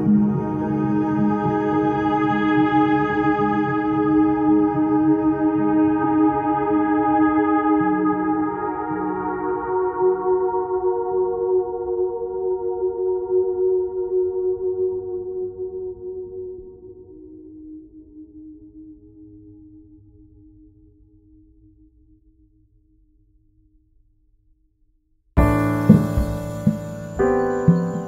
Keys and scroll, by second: 0.9 ctrl+z, 23.3-24.4 typing.